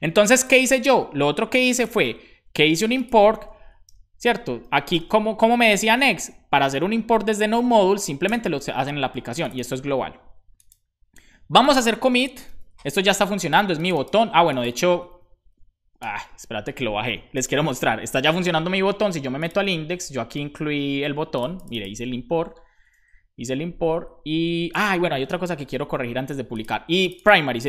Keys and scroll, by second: 4.6 BackSpace, 5.7 super+s, 7.5 super+Right, 8.2 super+Left, 12.5 ctrl+c, 15.1 Up, 15.8 Return, 22.3 super+Right, 22.8 super+Left.